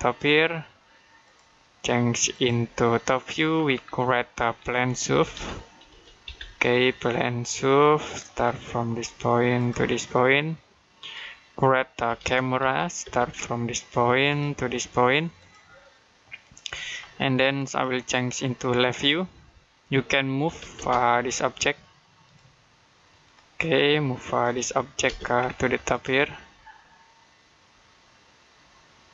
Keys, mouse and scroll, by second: 1.1 click, 3.6-4.2 scroll down 1, 4.2 middle click, 4.7-5.7 typing, 7.9 click, 8.3-9.4 scroll down 1, 9.4 click, 11.7-12.9 typing, 14.1 click, 20.3 m, 20.6 space, 21.1 click, 24.9 space, 25.2-25.7 scroll up 1, 25.7 click.